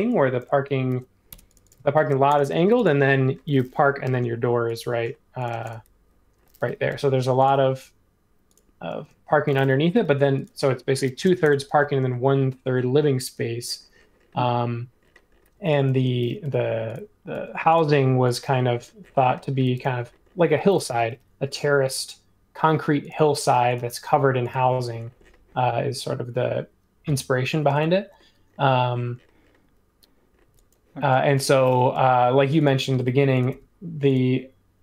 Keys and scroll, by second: 0.9 super+c, 1.3 BackSpace, 1.9 shift+v, 5.5 space, 6.9 |, 9.0 space, 9.9 l, 11.9 typing, 15.5 e, 16.4 l, 17.3 ⟲, 18.4 space, 21.1 |, 24.0 Escape, 27.5 Escape, 30.4 e, 31.9 l, 33.5 Escape.